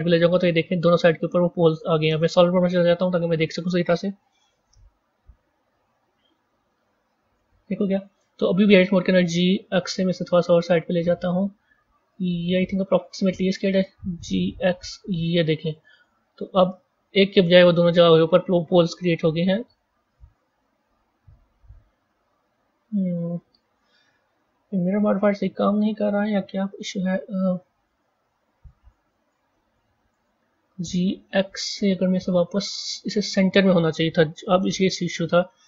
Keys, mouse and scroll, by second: 1.1 middle click, 2.1 z, 4.5 KP_1, 5.9 KP_3, 7.3 KP_1, 8.8 g, 12.6-14.1 middle drag, 14.1 g, 17.4 Tab, 18.2-21.2 middle drag, 26.2-26.9 scroll down 3, 27.5 Tab, 30.5 g, 34.5 KP_1.